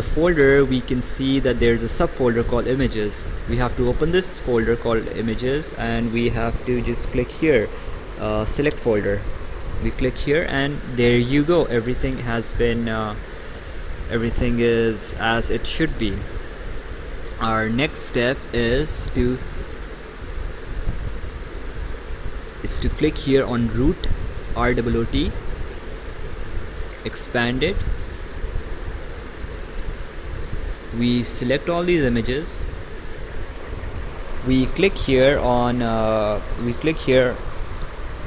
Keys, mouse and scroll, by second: 3.9 click, 9.1 click, 11.9 right click, 14.0 right click, 16.2 right click, 18.8 click, 20.3 click, 21.6 click, 25.5 click, 27.0 click, 28.1 click, 32.1 shift+click.